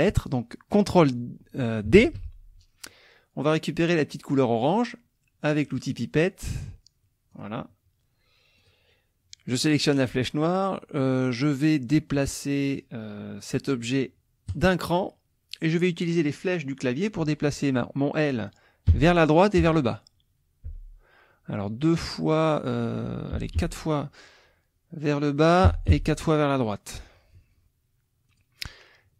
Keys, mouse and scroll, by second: 2.0 ctrl+d, 5.9 click, 7.3 click, 8.6 click, 14.5 click, 18.9 Right, 19.6 Down, 20.6 Down, 23.3 Down, 25.6 Right, 28.3 click.